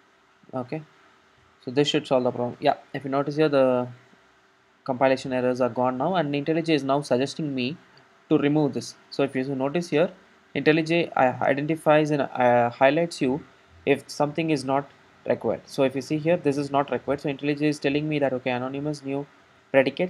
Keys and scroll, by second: 0.1 ctrl+alt+super+;.